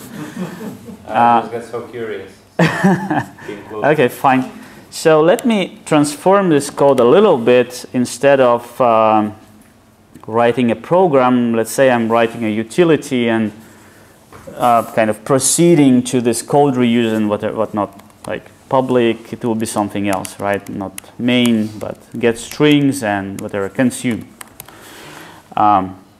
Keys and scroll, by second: 18.9 Return, 20.1 alt+shift+Left, 23.3 alt+shift+Left.